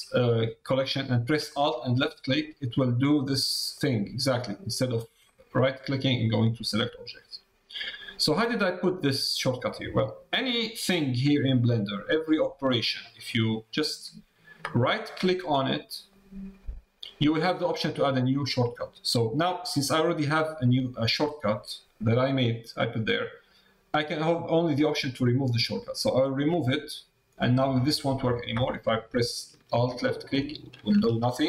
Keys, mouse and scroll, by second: 1.8 alt+click, 3.7 middle click, 8.5-29.0 right drag, 30.3 alt+click.